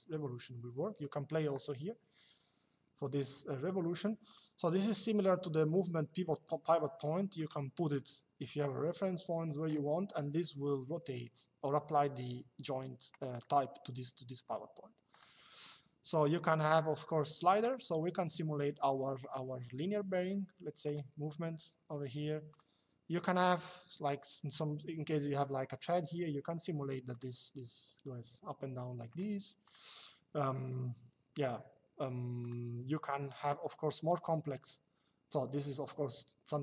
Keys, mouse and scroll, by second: 0.7 click, 4.0 click, 14.8 click, 16.3 click, 20.5 click, 22.2 click, 26.8 click, 28.8 click, 32.1 click, 34.2 click.